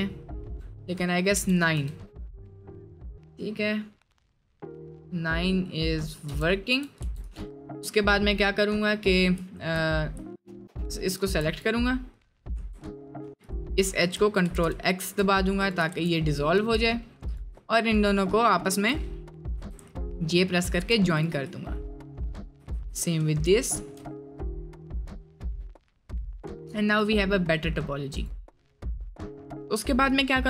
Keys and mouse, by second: 2.6 middle click, 3.1 middle click, 3.8 middle click, 4.2 middle click, 4.7 click, 5.7 middle click, 6.3 Tab, 6.6 middle click, 7.3 click, 7.6 middle click, 9.0 click, 9.4 shift+middle click, 10.3 shift+middle click, 10.6 2, 11.1 1, 12.4 2, 14.5 ctrl+x, 14.9 shift+middle click, 16.0 ctrl+x, 16.6 1, 18.0 shift+click, 18.4 shift+click, 19.5 j, 20.1 shift+middle click, 22.1 shift+click, 22.7 j, 23.6 shift+middle click, 25.1 middle click, 30.2 click.